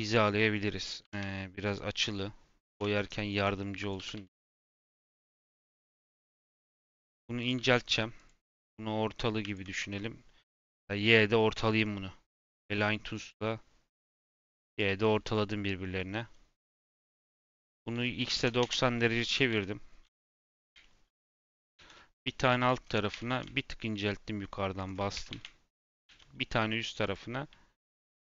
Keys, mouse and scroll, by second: 3.7 click, 9.4 shift+click, 9.7 n, 12.4-15.1 drag, 15.1 n, 16.6 click, 17.2 r, 19.4 KP_1, 20.7-21.5 shift+middle drag, 21.5 g, 25.1 s, 25.8 shift+d, 27.7 shift+d.